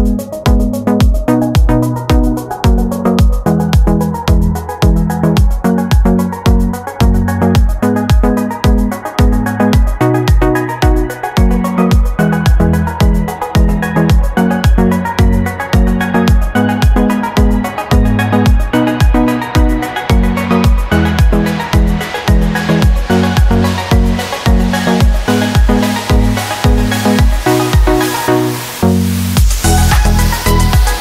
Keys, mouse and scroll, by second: 1.2-3.1 drag, 5.1 click, 5.9 click, 7.3-10.2 typing, 11.5 shift+e, 12.8 click, 13.7 click, 14.7 click, 15.8 click, 16.9 click, 17.8 click, 19.1 ctrl+a, 20.4 click, 22.1 scroll down 2, 22.4 scroll up 2, 23.6 click, 25.3 click, 25.8-26.4 scroll down 2, 26.8 scroll down 2, 27.7 click, 28.6-29.6 typing, 30.4 click.